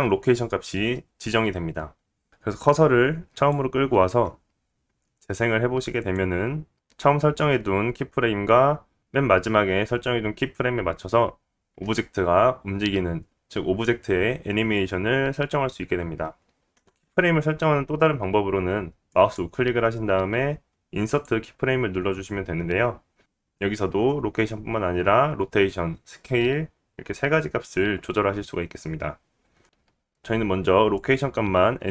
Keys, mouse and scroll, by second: 2.3-31.9 drag, 16.7 x, 19.0-31.9 right drag, 19.3-31.9 middle drag.